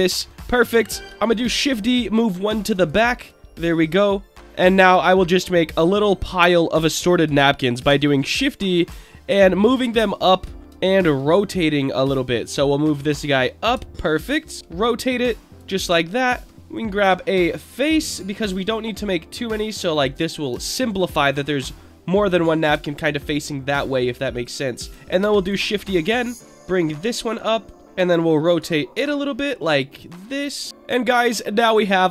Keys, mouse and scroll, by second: 0.0-0.3 middle drag, 0.4-1.0 scroll up 2, 1.0 scroll down 2, 1.0 shift+d, 1.2 click, 2.1-2.8 drag, 3.1 click, 3.4-4.0 middle drag, 4.0 scroll up 1, 4.2 scroll down 2, 4.3 scroll up 4, 4.4-4.8 middle drag, 5.0 shift+middle drag, 5.5-5.9 scroll up 3, 5.9-6.3 shift+middle drag, 6.9 scroll down 2, 7.8 shift+d, 8.1 click, 9.1 alt+middle drag, 9.5 alt+middle drag, 10.0-10.4 scroll down 3, 10.6 shift+middle click, 10.6 scroll up 2, 10.8 shift+middle drag, 11.9-13.6 drag, 13.9 alt+middle click, 14.4-15.5 scroll down 3, 14.6 r, 15.5 click, 16.0 alt+middle click, 16.5-16.9 scroll up 5, 16.5 Tab, 16.9 click, 17.5 click, 18.4-20.0 drag, 20.5 Tab, 20.9-21.2 scroll down 2, 21.2-22.6 middle drag, 22.8 alt+middle drag, 23.1 alt+middle drag, 24.3 click, 25.2 shift+d, 25.4 click, 26.3-27.7 drag, 27.7 alt+middle click, 27.7-28.6 scroll down 3, 28.6 r, 30.7 Tab, 30.7 click, 30.7 scroll down 3, 30.9-31.7 middle drag, 31.9-32.1 drag.